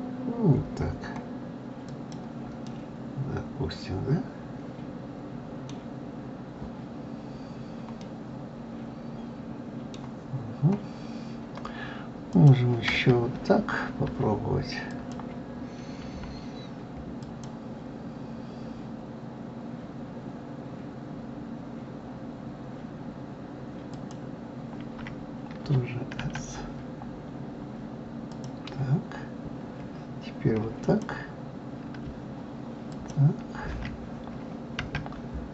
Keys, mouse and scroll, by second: 2.6-5.6 middle drag, 8.0-10.4 middle drag, 10.4-12.3 scroll up 4, 12.3 click, 14.9 shift+click, 17.2 alt+shift+click, 23.9 alt+shift+click, 26.2 s, 30.8 alt+click, 32.9 alt+shift+click, 34.8 s.